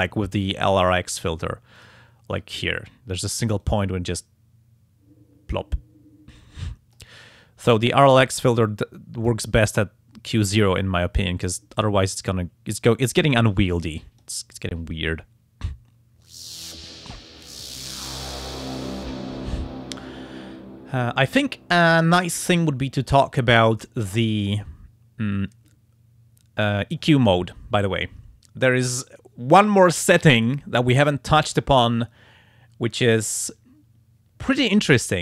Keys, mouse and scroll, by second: 0.6 click, 1.8 click, 3.6-7.2 drag, 8.5 click, 10.6-14.4 drag.